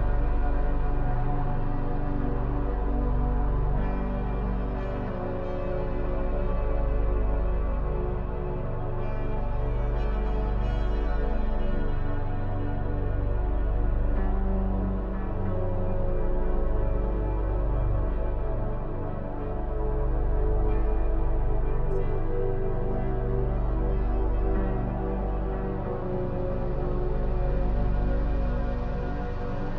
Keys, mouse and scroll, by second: 0.7 shift+e, 3.5 click, 4.2 shift+e, 6.6 click, 7.0 shift+e, 8.7 middle click, 9.3 Tab, 9.8-12.2 shift+middle drag, 12.2-12.8 scroll up 1, 12.8-18.0 middle drag, 21.2-21.8 scroll down 2, 21.8-27.2 middle drag, 27.2 click, 27.6 Tab, 28.7 1, 29.3 click.